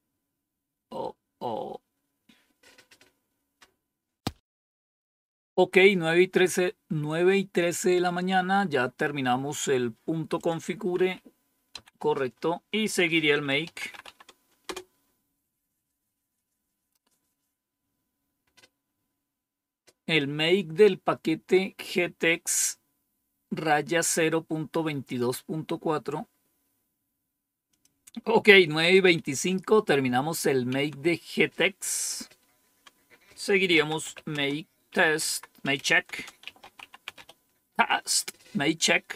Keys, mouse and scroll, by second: 10.3 click, 10.9 Page_Up, 11.1 Up, 11.6 Page_Down, 12.7 click, 13.3-14.4 typing, 14.5 Return, 26.8-27.7 scroll down 1, 27.7 click, 29.0 Up, 30.6 Down, 33.4-37.5 typing.